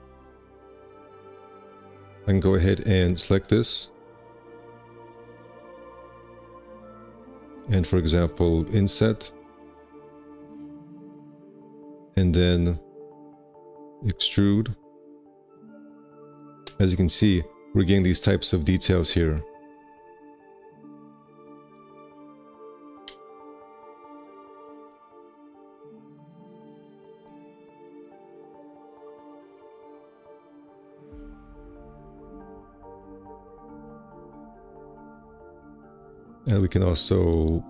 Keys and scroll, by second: 0.7 `, 1.0 4, 8.9 ctrl+space, 14.2 shift+space, 17.0 4, 22.8 space, 23.4 F4, 27.4 1, 35.0 `, 35.3 2.